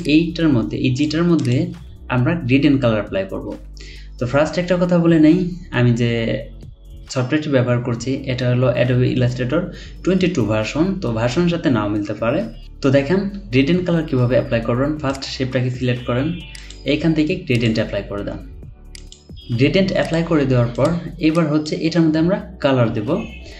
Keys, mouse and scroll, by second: 0.0 alt+click.